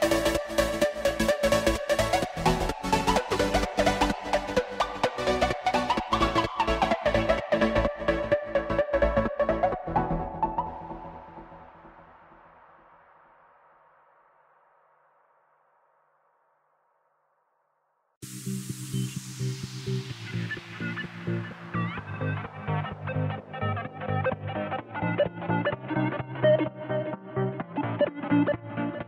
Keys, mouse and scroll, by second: 7.8 KP_0, 10.0 click, 19.8-25.0 drag, 28.0-29.0 drag.